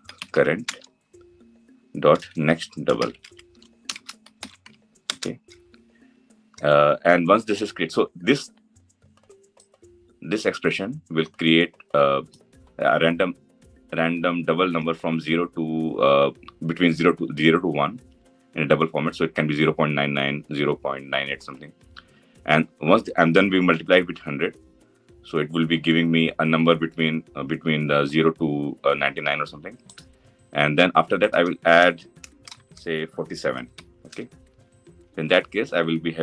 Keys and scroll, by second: 4.7 Return.